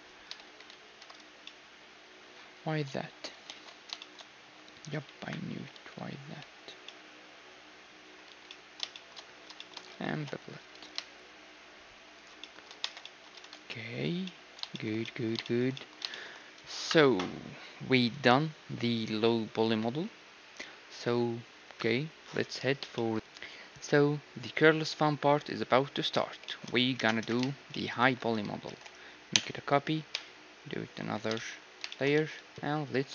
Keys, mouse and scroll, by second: 0.1-4.0 middle drag, 0.5 ctrl+shift+z, 0.8 ctrl+shift+z, 3.5 ctrl+z, 5.3 KP_1, 5.8 z, 6.2 b, 8.3 z, 9.0-11.5 middle drag, 10.2 ctrl+b, 12.5-18.0 middle drag, 12.9 Tab, 13.4 ctrl+s, 16.9 KP_1, 23.0 middle click, 26.4-29.5 middle drag, 27.2 KP_1, 28.0 a, 28.6 shift+d, 29.3 m, 31.0 2, 31.3-33.1 middle drag, 32.1 z, 32.3 z.